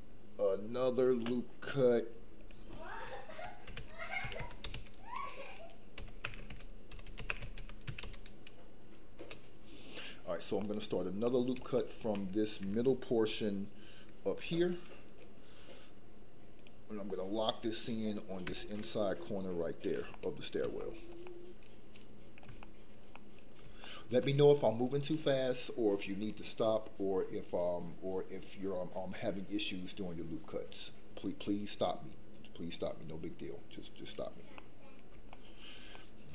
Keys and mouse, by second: 10.6 middle click, 11.2 middle click, 11.8 shift+middle click, 14.4 ctrl+r, 20.2 middle click, 20.9 shift+middle click, 21.3-22.3 middle drag, 22.6 shift+middle click, 23.2 middle click, 23.8 shift+middle click, 34.6 middle click, 35.4 shift+middle click, 36.0 middle click.